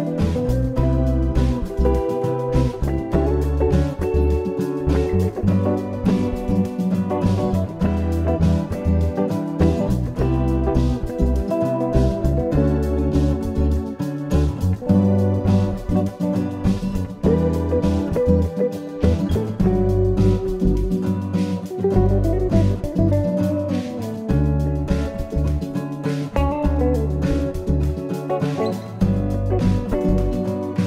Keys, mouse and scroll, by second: 1.7 middle click, 4.6 click, 8.2 click, 10.5 click, 12.5-13.3 scroll up 2, 13.6 scroll up 2, 15.6 i, 19.9 i, 30.2 click.